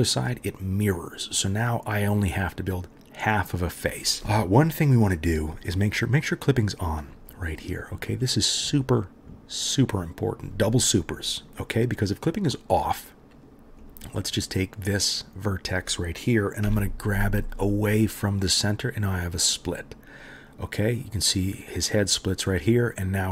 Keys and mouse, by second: 5.8 middle click, 5.9 right click, 6.4 middle click, 6.5 right click, 6.8 middle click, 6.9 right click, 7.1 middle click, 7.3 right click, 7.6 middle click, 7.7 right click, 7.9 middle click, 8.0 right click, 8.3 middle click, 8.4 right click, 8.7 middle click, 8.8 right click, 9.3 middle click, 9.4-14.6 right drag, 14.6-23.3 middle drag, 16.6 g.